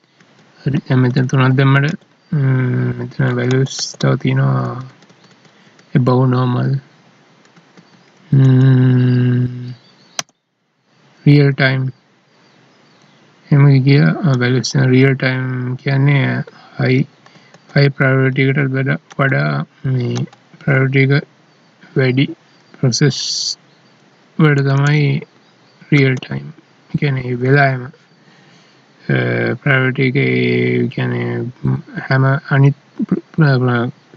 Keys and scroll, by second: 0.2 Down, 3.3 Up, 4.6 Down, 7.5 ctrl+s, 8.4 Down, 10.2 End, 16.5 Up, 19.1 Left, 20.2 ctrl+Left, 24.7 Right, 27.2 ctrl+s.